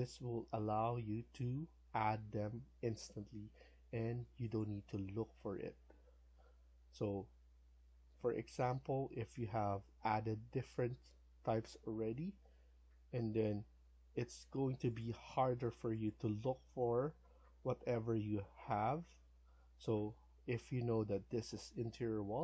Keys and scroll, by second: 13.4 Escape, 13.7 Escape, 19.5 Escape, 19.8 Escape, 20.0 Escape.